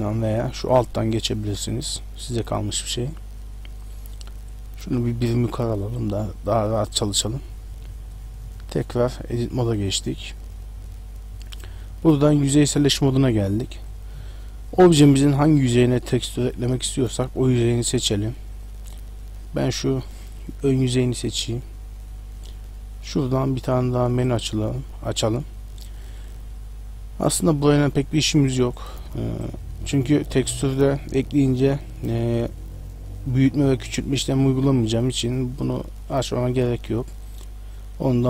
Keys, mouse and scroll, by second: 0.0 Tab, 0.7 click, 2.3 shift+middle click, 2.7 middle click, 4.5 Tab, 5.4 ctrl+click, 6.6 shift+middle click, 8.0 Tab, 8.8 shift+middle click, 12.2 click, 13.8 right click, 14.3 middle click, 16.9 right click, 17.8 middle click, 18.6 right click, 19.0 middle click, 23.2 click, 28.8 click, 36.1 click.